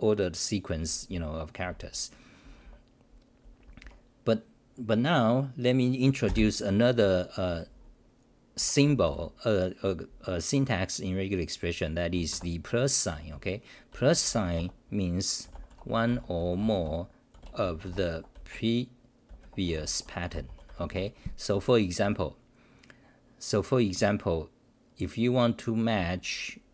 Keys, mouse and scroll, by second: 1.6-3.4 typing, 8.5 Home, 12.9-14.6 typing, 21.0 Home, 22.0 j, 26.2 c.